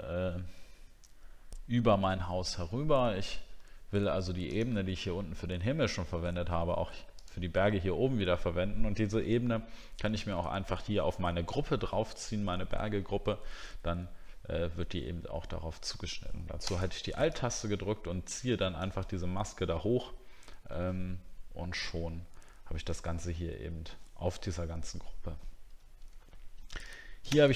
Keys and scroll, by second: 26.2 alt+scroll up 1.